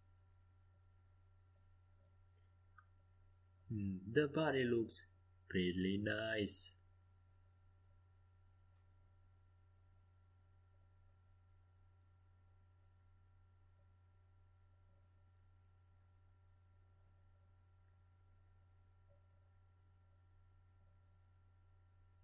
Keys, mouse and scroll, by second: 6.7-8.5 middle drag, 11.7-14.4 middle drag, 17.1 middle click.